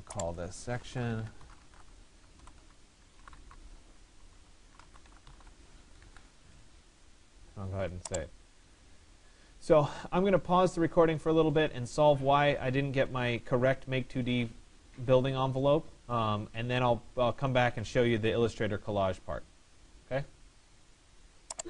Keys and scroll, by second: 5.7 1, 6.3 Escape.